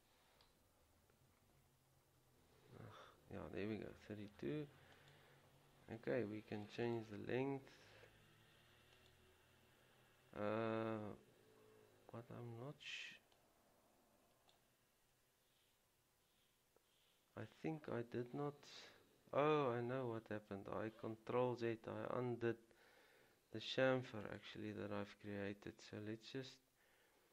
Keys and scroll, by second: 2.2 ctrl+z.